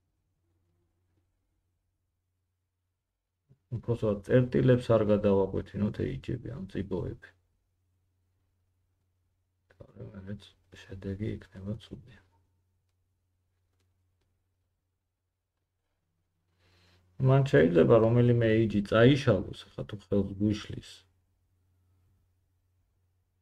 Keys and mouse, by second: 2.1 g, 4.3 g, 6.3 click, 6.5 g, 7.4-9.5 drag, 9.5-11.6 middle drag, 9.7 g, 11.6-16.1 drag, 16.1 middle click, 16.2-19.0 drag, 16.6 g, 19.0 middle click, 19.2-23.4 drag, 19.5 g.